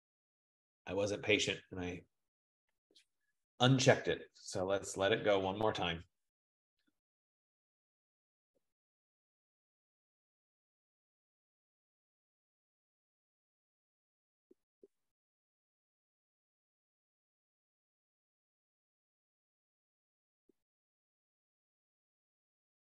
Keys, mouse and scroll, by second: 2.6-3.7 drag.